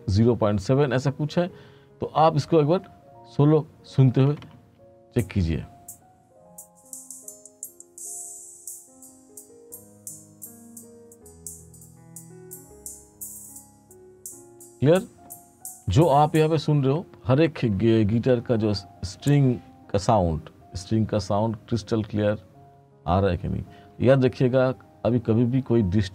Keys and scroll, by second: 4.5 space, 16.0 space.